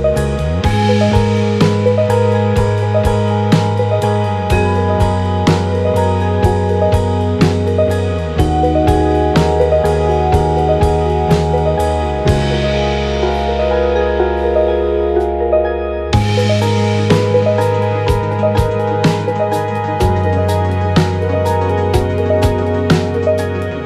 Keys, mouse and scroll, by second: 1.2 click, 2.3 click, 2.4 Tab, 4.0 click, 5.2-10.6 drag, 11.0-19.6 drag, 19.6 KP_0.